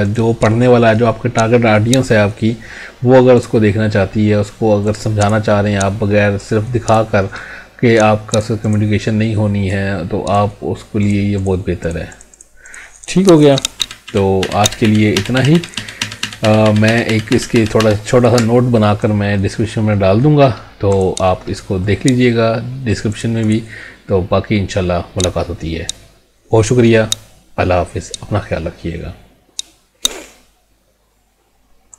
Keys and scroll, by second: 13.8 ctrl+z.